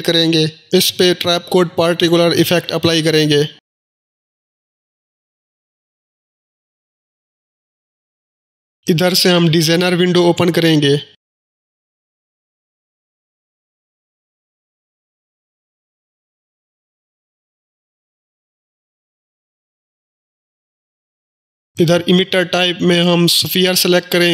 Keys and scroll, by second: 0.6 ctrl+space, 0.8-2.3 typing, 2.5 Return.